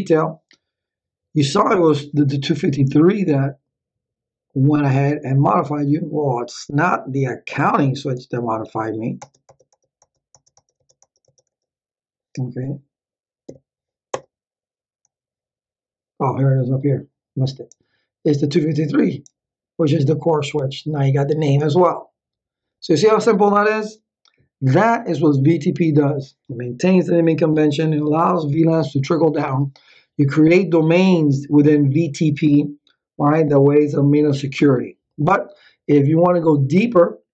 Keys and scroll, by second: 9.2 Return, 13.4 Up, 14.1 Return.